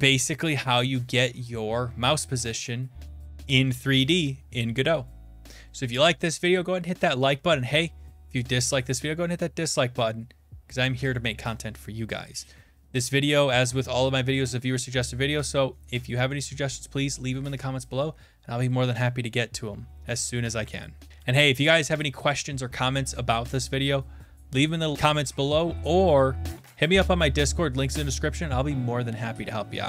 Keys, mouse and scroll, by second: 21.1 Num_Lock.